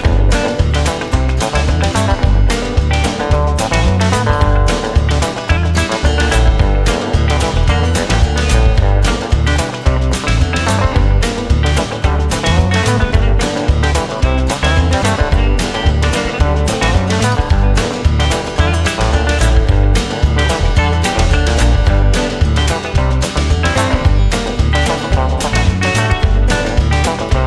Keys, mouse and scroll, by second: 0.7 space, 1.7 space, 1.8 right click, 1.9 space, 3.4 space, 4.4 right click, 5.2 right click, 8.9 right click, 9.3 right click, 9.8 right click, 12.2 right click, 13.5 right click, 14.2 right click, 16.3 right click, 16.8 right click, 17.7 right click, 18.5 right click, 19.9 right click, 20.2 right click, 21.0 right click, 22.9 right click, 24.8 right click, 25.4 right click.